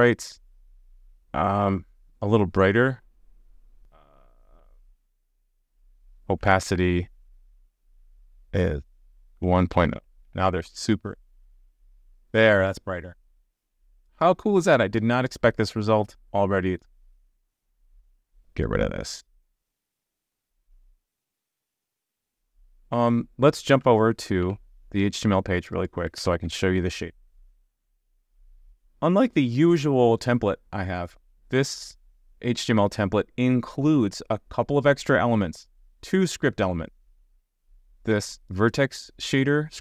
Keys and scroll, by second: 10.2 super+s, 20.9 super+s, 24.4 super+b.